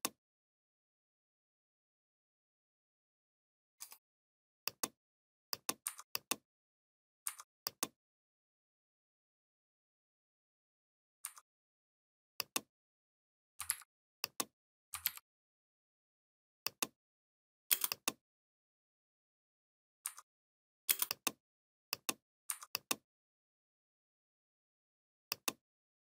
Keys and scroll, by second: 13.5 ctrl+c, 14.8 ctrl+v, 17.5 space, 20.7 space.